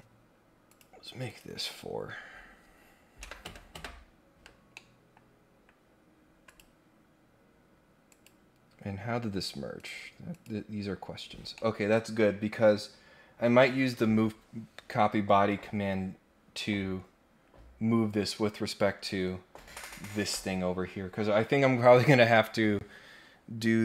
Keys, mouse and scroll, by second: 0.7 click, 1.2 click, 4.7 middle click, 5.2 scroll up 2, 5.5-5.8 scroll down 2, 6.0 scroll up 4, 6.5 click, 8.1 click, 9.7 click, 10.3 click, 11.1 scroll down 2, 11.5 middle click.